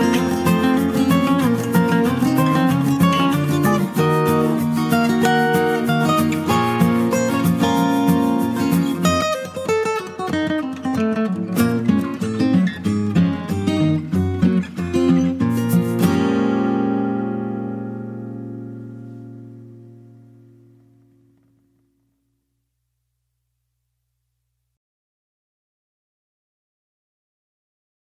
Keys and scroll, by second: 3.1 ctrl+space, 3.6 ctrl+space, 11.6 ctrl+j.